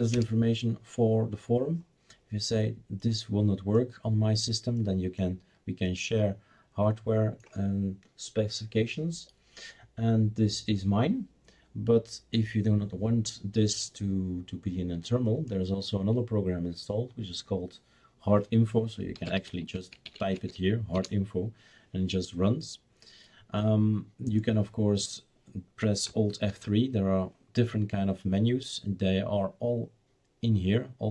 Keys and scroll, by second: 0.1 Return, 19.1-20.8 typing, 20.9 Return, 26.5 alt+F3.